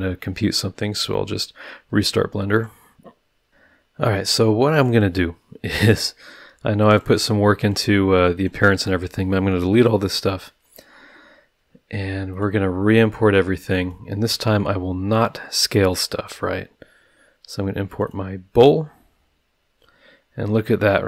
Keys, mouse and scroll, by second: 2.5 click, 4.7 click, 6.8 Delete, 6.9 click, 7.2 Delete, 7.6 click, 8.3 click, 8.8 Delete, 9.7-10.1 scroll down 2, 12.3 click, 13.2 click, 13.8 click, 16.1 click, 17.9 click, 20.1-21.0 scroll down 2.